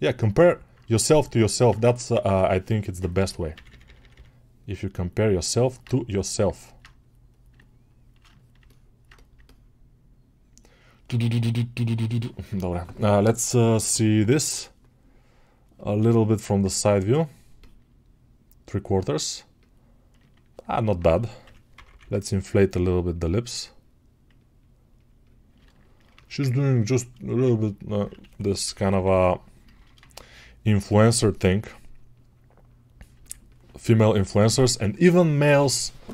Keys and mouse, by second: 1.7 1, 20.0-36.1 ctrl+alt+right drag.